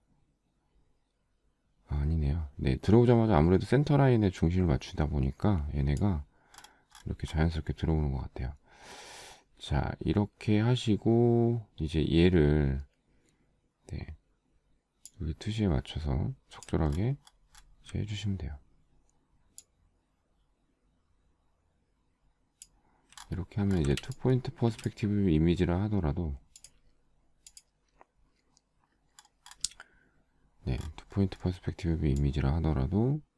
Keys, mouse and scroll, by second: 17.0 alt+scroll up 1, 23.4 alt+scroll down 1, 24.2 space, 24.7 space, 24.9 space, 25.1 space.